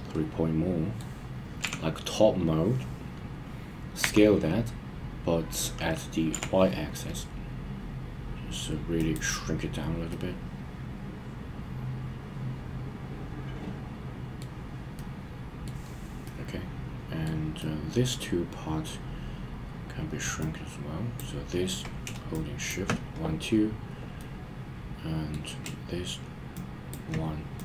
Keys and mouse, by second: 1.6 KP_7, 4.0 s, 6.3 y, 8.9 click, 10.1-14.4 middle drag, 14.9-15.7 middle drag, 16.2-17.3 middle drag, 17.6-18.1 middle drag, 20.4 click, 20.9 drag, 22.5 shift+click, 24.2-25.3 middle drag, 26.5-26.9 shift+drag, 27.5 click.